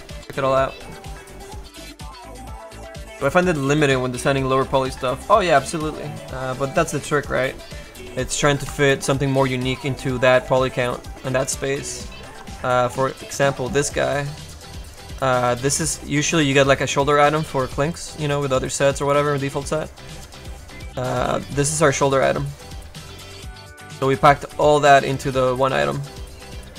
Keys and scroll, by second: 13.6 space, 16.4 m, 21.6 a, 23.4 space, 25.2 space.